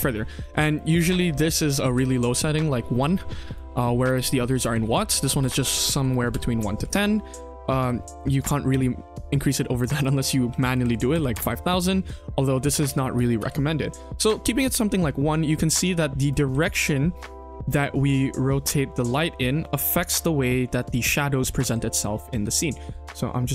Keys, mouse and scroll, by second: 3.7 click, 4.6 ctrl+z, 5.3 click, 7.3 click, 9.9-11.3 drag, 10.8 KP_0, 12.8 ctrl+z, 13.3 ctrl+z, 14.2-14.6 scroll down 2, 14.6-15.4 scroll up 3, 15.0 KP_1, 15.4-15.7 middle drag, 16.2 click, 16.4 KP_3, 16.6 scroll down 2, 16.8 scroll up 1, 16.8-17.2 middle drag, 17.4 shift+middle drag, 18.0 r, 21.8-22.2 middle drag, 22.5 shift+middle click, 22.8-23.3 middle drag.